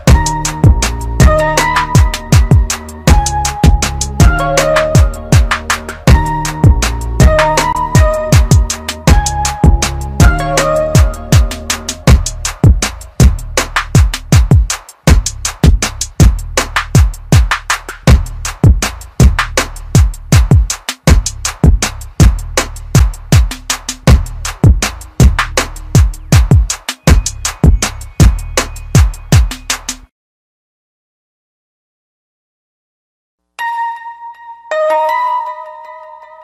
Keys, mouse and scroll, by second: 0.8 KP_Add, 1.7-2.1 scroll up 1, 4.2 ctrl+KP_Add, 8.8 right click, 9.7 click, 11.9 typing, 13.2-14.1 typing, 14.6 click, 19.8 typing, 20.9 click, 32.3-32.9 scroll up 1, 32.9 click, 35.4-35.9 typing, 36.1 click.